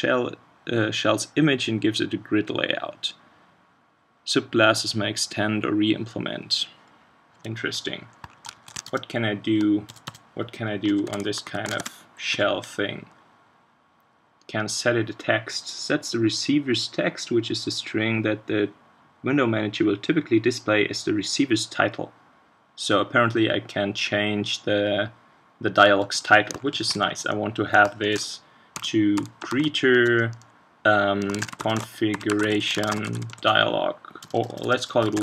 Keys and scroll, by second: 8.5 shift+super+Right, 11.7 ctrl+space.